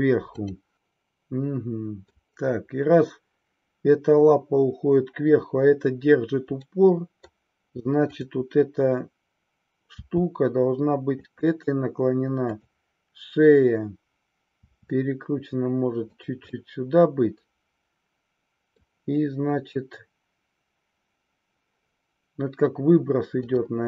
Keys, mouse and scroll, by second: 0.2 click, 0.8-2.1 middle drag, 6.6 scroll up 1, 6.8 middle click, 7.9-9.4 drag, 10.0 r, 11.2 click, 12.5-13.9 drag, 14.6 r, 16.2 click, 16.4-18.8 middle drag, 23.3 click.